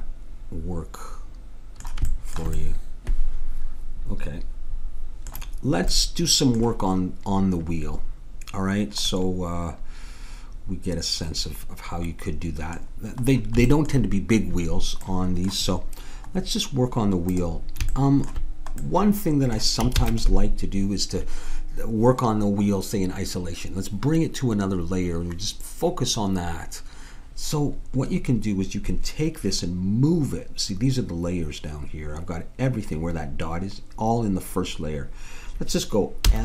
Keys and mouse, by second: 2.1-4.3 middle drag, 5.9-10.0 middle drag, 17.3-19.2 drag, 20.0 ctrl+s, 36.3 m.